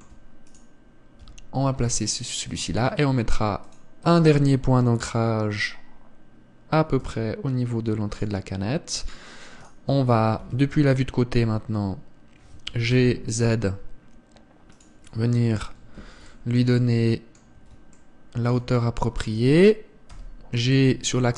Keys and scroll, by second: 1.9 g, 7.7 r, 11.1 KP_1, 13.4 g, 20.8 g.